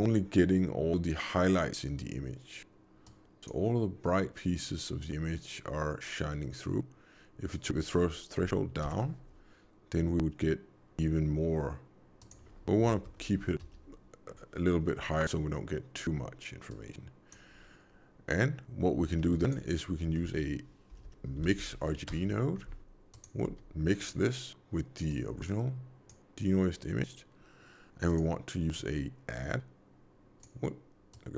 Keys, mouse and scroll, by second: 3.0 click, 7.4 click, 12.1 click, 16.6 click, 19.1 shift+a, 20.9 BackSpace, 23.4 g, 25.0 click, 28.0 click.